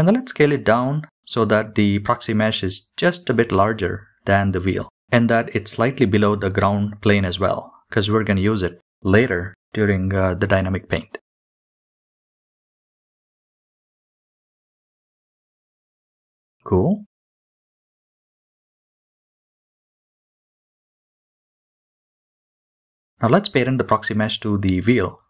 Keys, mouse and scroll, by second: 0.4 scroll up 2, 0.7 shift+middle click, 1.0 s, 2.2 scroll down 2, 2.3 middle click, 3.1 middle click, 3.5-3.9 scroll down 3, 3.7 KP_3, 4.4 s, 5.4 middle click, 5.8 s, 6.6 middle click, 7.8 g, 8.5 g, 9.9 middle click, 10.8 middle click, 11.3 scroll down 2, 11.4 middle click, 13.6-14.6 drag, 14.8 middle drag, 15.2 KP_3, 15.6 shift+middle click, 15.6 KP_1, 16.1-16.8 middle drag, 17.4 click, 18.4-18.9 shift+middle drag, 20.2 shift+click, 24.4 ctrl+p.